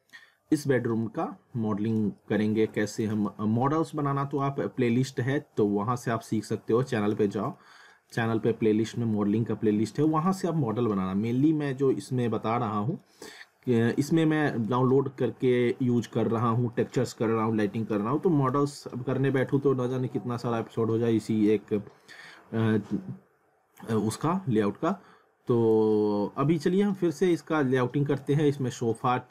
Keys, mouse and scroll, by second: 1.0 alt+middle click, 2.2 alt+middle click, 3.2 middle click, 6.1 middle click, 7.6 alt+middle click, 8.5 alt+middle click, 10.3 alt+middle click, 13.3 alt+middle click, 15.5 middle click, 16.8 middle click, 18.7 middle click, 19.6 middle click, 22.0 middle click, 24.5 scroll down 1, 24.9 scroll up 1, 25.9 alt+middle click, 27.1 scroll up 1, 27.3 alt+middle click.